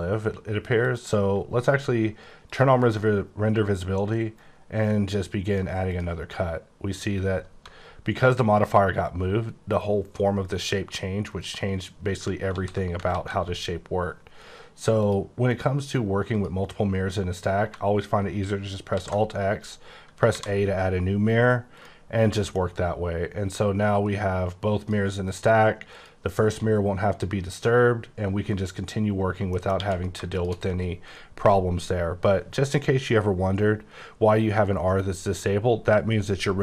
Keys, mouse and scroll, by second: 0.8 click, 2.4 click, 3.2-4.3 scroll up 6, 4.3 click, 5.9 click, 8.5 scroll down 4, 11.3 right click, 12.5 ctrl+z, 15.0 click, 15.4 click, 16.3 click, 18.9 x, 20.3 a, 21.7 click, 22.3 middle click, 22.6-23.5 scroll up 1, 23.5 click, 25.2 click, 27.5-28.1 scroll up 10, 29.5 middle click, 29.7 q, 30.3 shift+click, 32.0-35.2 scroll up 17.